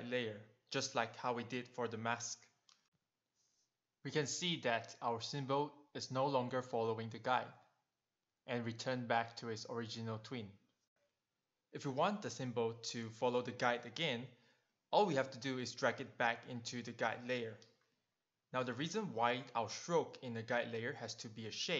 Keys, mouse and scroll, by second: 0.4 click, 3.2 click, 7.0 click, 7.6 click, 10.6 click, 16.4 click.